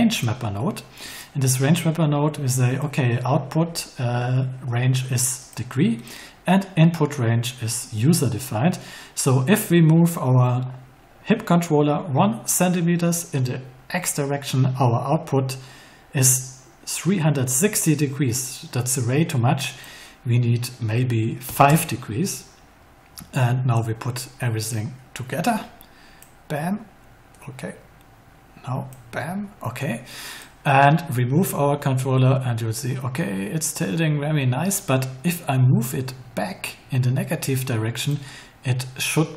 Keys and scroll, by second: 21.4 5, 21.6 Return.